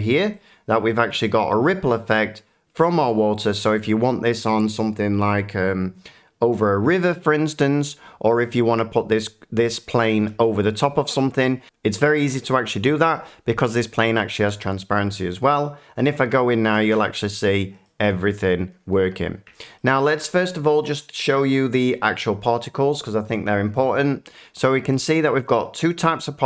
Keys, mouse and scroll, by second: 0.1 middle click, 0.7 shift+middle click, 1.6 middle click, 10.1-11.6 middle drag, 16.1 click, 17.8 middle click, 19.7 shift+middle click, 23.8 click, 25.2 shift+middle click.